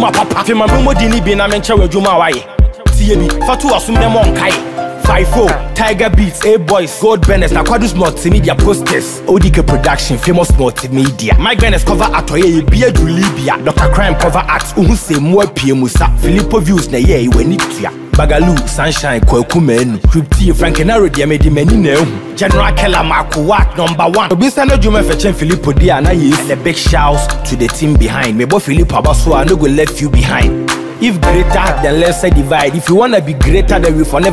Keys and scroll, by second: 28.8 Down.